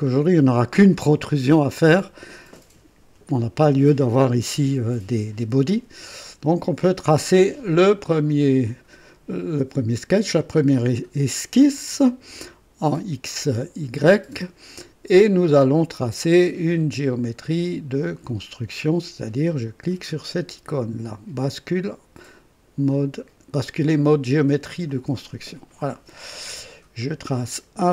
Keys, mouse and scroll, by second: 11.7 click, 14.0 click, 15.0-15.5 scroll down 1, 15.8-17.6 right drag, 24.9 click.